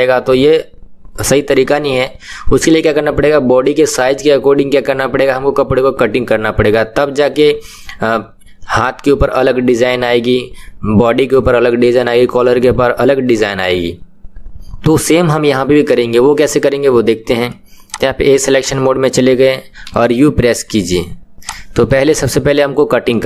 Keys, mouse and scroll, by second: 18.0 click, 21.5 click.